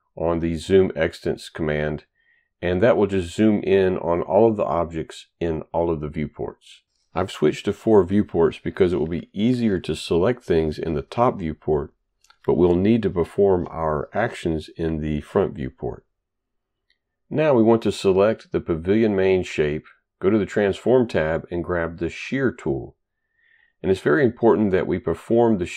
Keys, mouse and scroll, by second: 18.6 click, 20.4 click, 22.2 click.